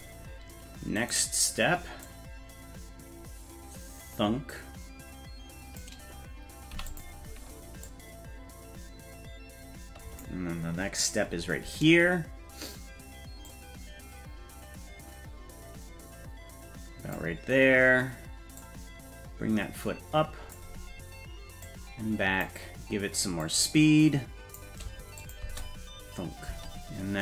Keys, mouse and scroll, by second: 1.0 right click, 2.0-5.8 drag, 6.7 i, 7.8-10.2 drag, 10.6-11.2 scroll down 2, 12.8-13.4 scroll down 1, 13.4-17.1 drag, 18.6-20.5 drag, 21.6 click, 23.4-24.6 drag, 25.2 click, 25.4 space, 26.5 space.